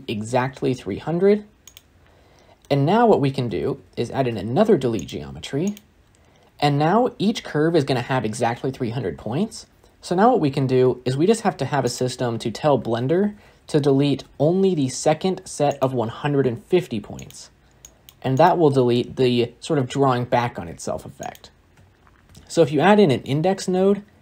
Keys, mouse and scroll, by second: 1.6 0, 4.9 shift+a.